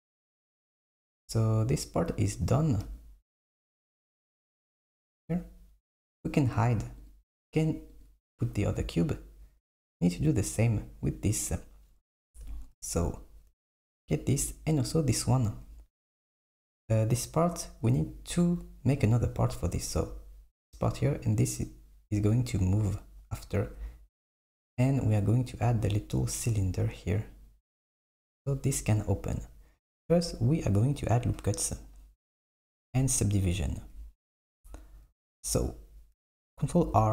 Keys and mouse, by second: 7.1 click, 7.9 click, 12.3 Tab, 13.1 click, 13.5 Tab, 19.9 click, 21.4 click, 36.7 r.